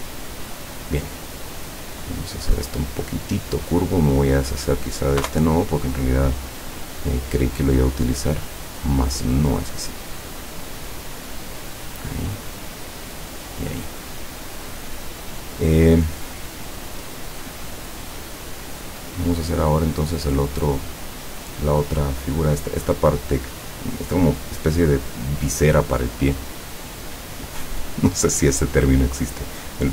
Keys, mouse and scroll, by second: 2.1 click, 4.5 click, 5.3 Delete, 8.8-9.9 drag, 11.2-12.4 drag, 13.0 click, 27.7 click.